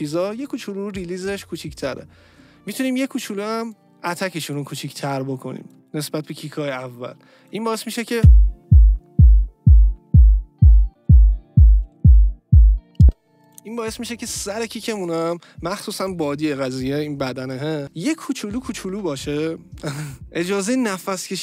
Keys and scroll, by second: 8.1 space, 13.0 space.